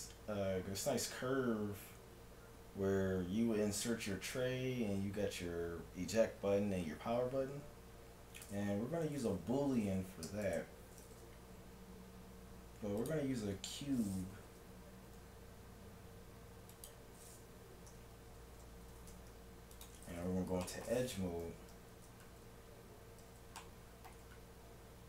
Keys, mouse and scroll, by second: 10.5 shift+a, 15.1 g, 17.9 Tab, 19.2 ctrl+Tab, 21.3-24.2 typing, 24.9 middle click.